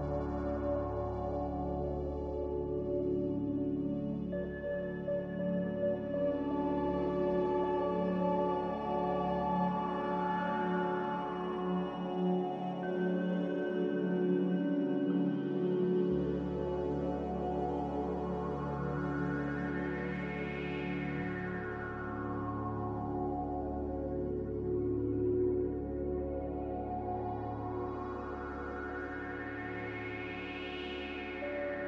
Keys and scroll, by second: 2.8 s, 4.7 z, 6.2 a, 16.6 a, 18.6 b, 19.8 Delete, 21.8 z, 22.3 Delete, 22.3 z, 23.6-24.3 typing, 27.3 5, 27.5 Return.